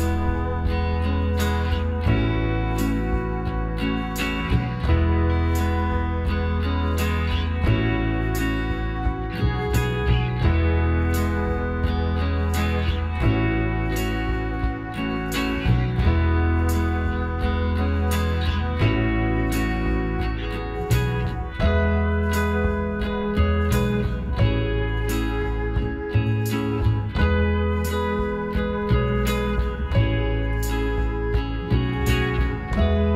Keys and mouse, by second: 1.0 b, 2.6 g, 4.3-6.1 right drag, 5.3 b, 6.8 g, 8.2 Tab, 8.5-9.6 right drag, 8.9 Tab, 9.6 middle click, 9.7 right click, 12.0-13.6 right drag, 13.1 b, 14.3-16.0 drag, 16.3 middle click, 16.5 middle click, 16.7 middle click, 16.9 click, 17.0-18.6 middle drag, 18.6 z, 19.4 Tab, 20.4-22.8 right drag, 20.7 Tab, 21.4 z, 21.8 middle click, 22.8-24.6 drag, 24.9 right click, 24.9-27.2 middle drag, 25.6-27.4 right drag, 26.4 b, 27.4-29.1 drag, 29.1 s, 31.0-33.1 drag, 32.7-33.1 right drag.